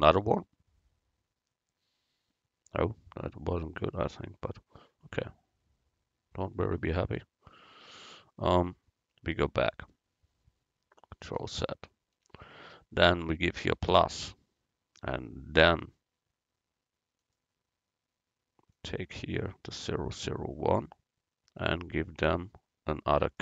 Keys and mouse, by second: 11.7 ctrl+z, 13.8 click, 14.7-15.7 drag, 17.3-20.7 drag, 23.3 click.